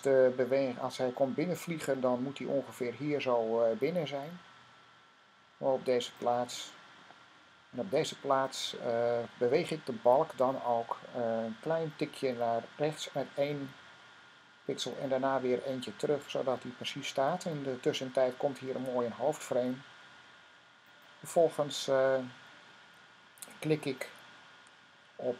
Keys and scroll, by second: 14.0 Right, 16.2 Left, 25.2 Right.